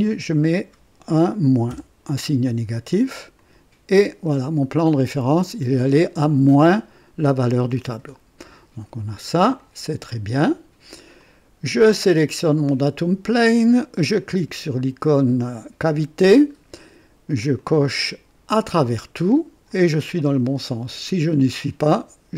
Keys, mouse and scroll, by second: 0.1 typing, 1.6 KP_Subtract, 1.6 typing, 3.3 click, 4.7-5.5 drag, 7.7-8.7 drag, 9.5-10.2 drag, 9.5 typing, 11.1 click, 12.5 click, 15.7 click, 17.5 click, 18.5 click, 19.7-20.5 drag, 21.6 click.